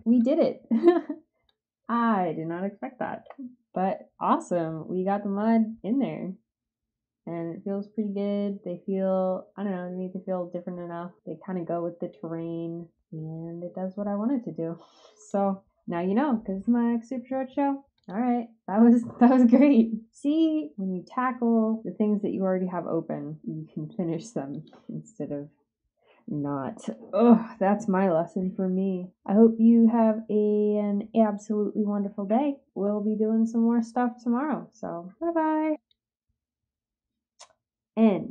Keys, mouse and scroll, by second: 0.1-1.4 drag, 3.1 ctrl+s, 5.7-15.2 drag, 17.9 click, 18.2-19.2 scroll up 2, 24.5 click, 35.7 click.